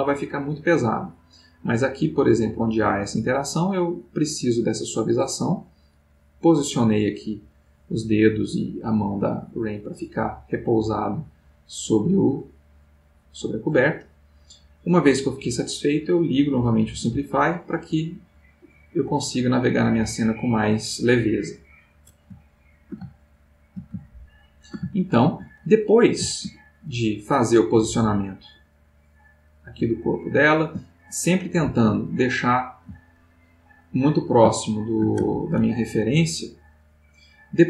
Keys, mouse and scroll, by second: 7.2 click, 9.0-13.9 middle drag, 15.0 middle click, 17.2 click, 18.8-20.2 middle drag, 21.6-23.3 drag, 23.3-26.4 ctrl+shift+middle drag, 27.1-30.6 drag, 31.0-32.2 ctrl+middle drag, 32.2 ctrl+middle click, 33.7 click, 35.0-36.1 ctrl+shift+middle drag, 36.8-37.6 drag.